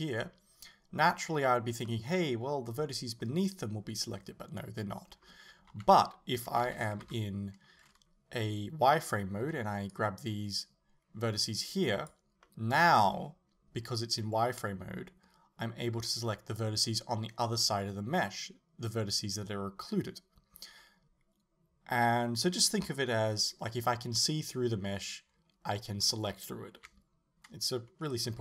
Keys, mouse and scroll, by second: 1.9 middle click, 5.7 KP_7, 6.7 a, 7.1 z, 9.5 b, 9.6-12.5 middle drag, 26.8 KP_7.